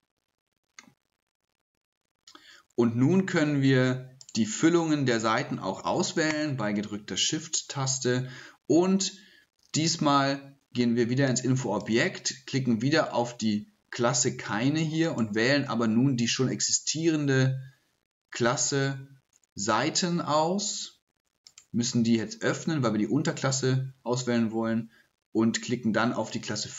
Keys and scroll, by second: 5.7 typing.